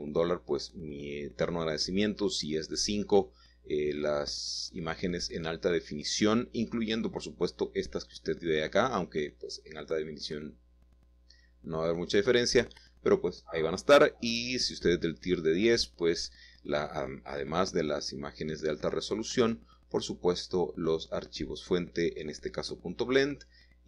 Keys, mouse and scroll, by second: 6.1 s, 6.7 y, 7.4 Escape, 8.0 s, 8.2 x, 11.2 click, 11.6 middle click, 13.6 7, 14.8 shift+click, 14.8 shift+middle click, 18.1 shift+middle click, 20.4-21.2 typing, 21.9 Escape, 22.4-22.8 typing.